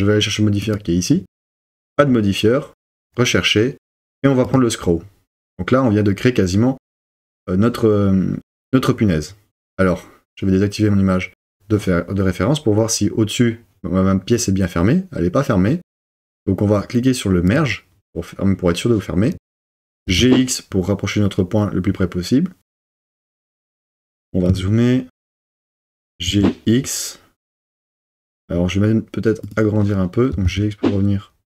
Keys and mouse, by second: 2.1-4.6 drag, 19.9 g, 20.2 x, 22.8 click, 25.9 g, 26.3 x, 27.8 click, 30.3 g, 30.5 x.